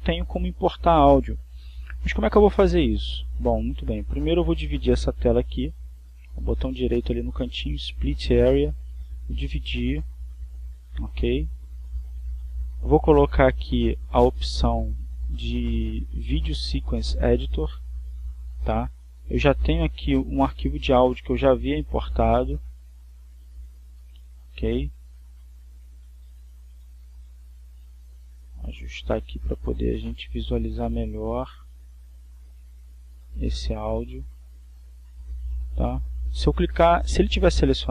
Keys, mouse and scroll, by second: 6.4 right click, 8.8 click, 9.9 click, 12.4-14.3 drag, 15.1 click, 18.6 click, 22.2-23.4 shift+middle drag, 24.7-25.3 scroll down 2, 25.6-26.1 scroll up 2, 26.6-28.4 drag, 29.0 shift+middle click, 29.6 middle click, 30.1 middle click, 31.6-34.1 drag, 34.1 shift+middle click, 34.6-35.8 shift+drag, 35.8-37.1 shift+middle drag, 37.6 right click.